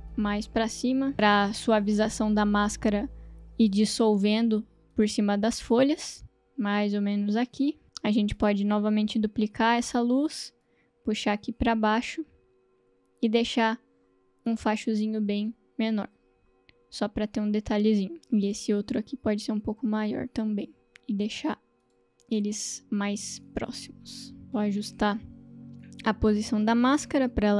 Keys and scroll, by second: 9.2 ctrl+d.